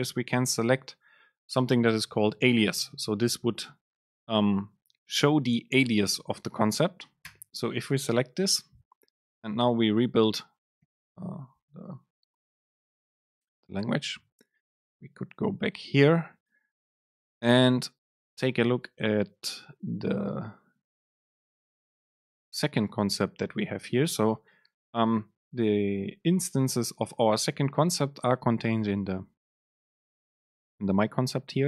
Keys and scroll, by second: 10.9 ctrl+shift+super+F9.